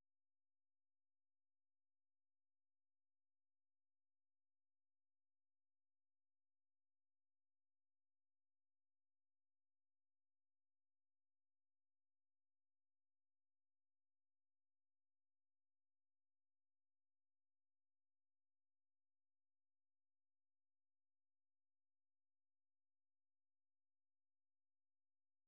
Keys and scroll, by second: 8.9 super+1, 11.4-20.7 typing, 22.7-25.0 typing.